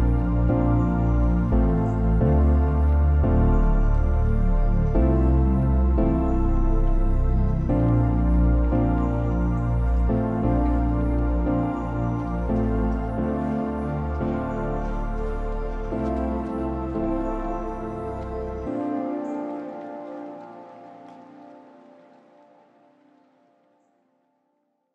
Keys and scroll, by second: 17.7 0.